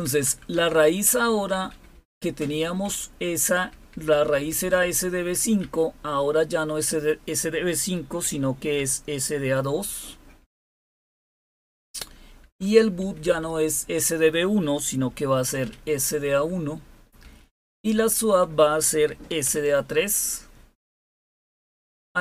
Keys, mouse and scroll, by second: 0.0-2.1 typing, 2.8 Down, 3.6 Right, 3.9 Right, 4.0 Right, 4.3 Right, 4.4 Right, 4.6 Right, 5.5 Left, 8.2-8.7 typing, 10.3 Delete, 10.9 Delete, 12.4 Down, 12.9 Left, 13.2 Left, 14.9 Delete, 15.6 a, 17.1 Down, 17.7 Left, 18.9 Delete, 19.0-19.4 typing, 20.8 Down, 20.8-21.9 typing, 21.4 Up.